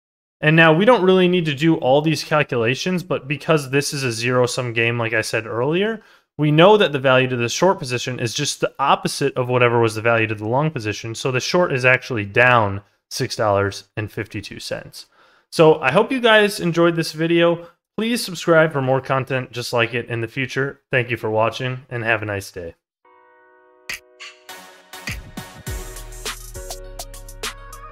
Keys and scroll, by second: 1.9 ctrl+z.